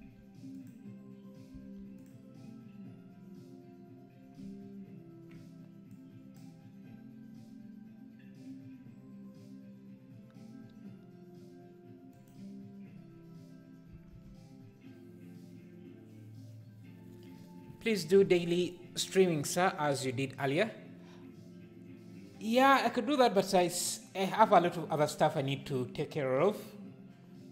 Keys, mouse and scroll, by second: 1.5 s, 6.0 click, 12.1 click.